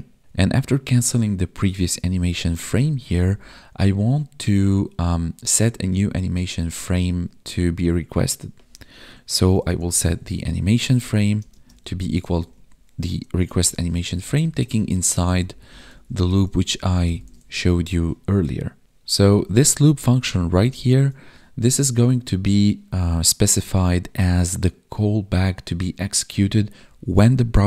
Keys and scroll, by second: 2.6 Up, 3.1 Down, 10.7 Tab, 11.2 space, 11.5 space, 13.5 Tab, 16.4 ctrl+s, 16.7 Right, 17.2 ctrl+s, 19.1 Left, 20.1 ctrl+shift+Left, 20.4 ctrl+shift+Right, 20.5 ctrl+shift+Left.